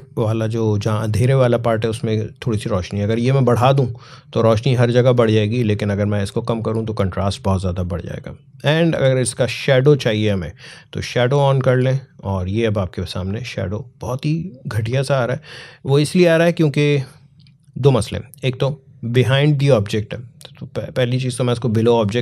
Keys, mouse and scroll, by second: 2.8-16.3 drag, 19.7 click.